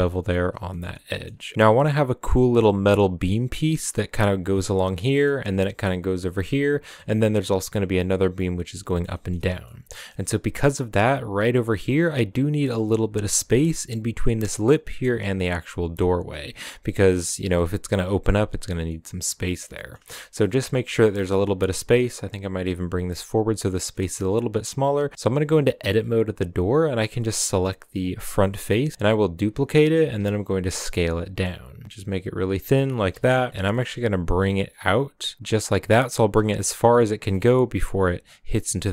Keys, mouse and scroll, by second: 0.2 scroll down 4, 0.4 a, 0.7-1.5 shift+middle drag, 1.5-4.0 scroll down 2, 4.0-4.8 scroll down 1, 4.8-6.1 shift+middle drag, 6.1-6.8 scroll down 2, 6.3 middle drag, 6.8-9.3 shift+middle drag, 9.3 scroll up 2, 9.4 a, 9.6-10.2 middle drag, 10.2-10.6 scroll up 2, 10.6-11.7 middle drag, 11.7-13.6 scroll up 3, 13.6 right click, 14.4-15.2 scroll down 1, 15.2-16.6 right drag, 16.6 middle click, 17.0-18.7 scroll down 1, 18.7 scroll down 1, 18.8-19.3 middle drag, 19.3 scroll down 4, 19.6 middle click, 20.0 Tab, 20.1 scroll up 2, 20.4-20.8 middle drag, 20.8 scroll up 1, 20.8-21.3 middle drag, 21.3 g, 23.7 middle drag, 23.9 Tab, 24.6 a, 25.1 middle click, 25.3 Tab, 26.4-28.9 right drag, 28.9 middle click, 29.2 scroll up 1, 29.5 shift+d, 29.9 s, 33.1 KP_Decimal, 33.5 middle click, 33.6 g, 36.7 middle click, 37.0 scroll up 1, 37.2 g.